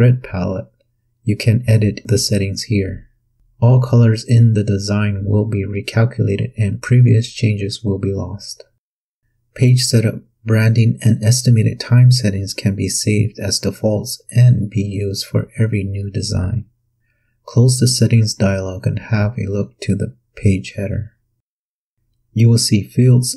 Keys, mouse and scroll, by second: 0.8 click, 9.2 click, 11.8 click, 16.7 click, 20.3 click, 21.8-22.4 scroll up 1, 22.7 scroll up 1.